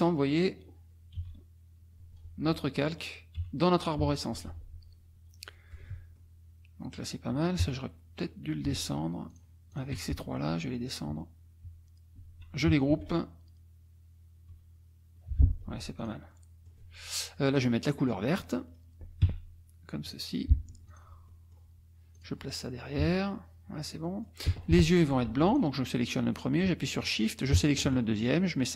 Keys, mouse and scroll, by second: 1.2 Page_Up, 3.4 Page_Up, 4.5 Page_Down, 6.2 click, 7.4 click, 9.3 shift+click, 9.7 shift+click, 10.5 Page_Down, 12.9 ctrl+g, 14.5 Page_Up, 16.0 click, 16.3-16.9 scroll up 2, 17.6 click, 19.2 d, 20.1 click, 20.8 F1, 20.9 click, 21.3 middle click, 21.6 click, 22.2 click, 23.0 Page_Down, 24.1 click, 24.8 F2, 25.5 click, 27.1 shift+click.